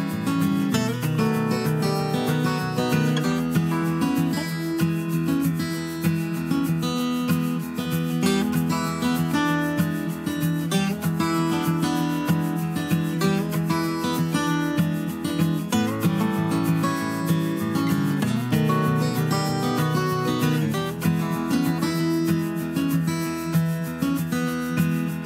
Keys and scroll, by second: 5.7 Down, 5.8 Down, 6.0 Down, 6.1 Down, 19.4 super+a.